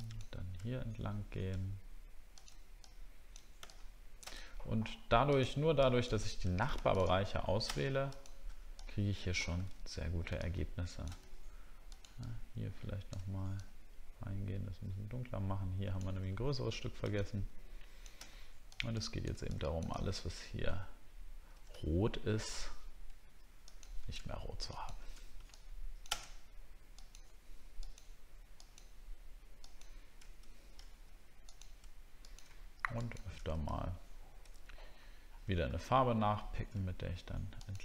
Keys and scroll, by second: 16.5 alt+scroll down 1, 20.1-20.4 alt+scroll down 1, 20.8 alt+scroll down 1, 30.8 alt+scroll up 1.